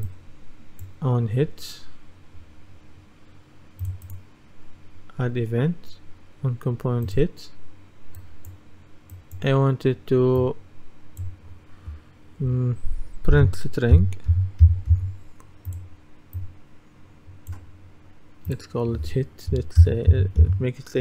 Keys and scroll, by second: 13.4-15.2 typing, 19.9 shift+h.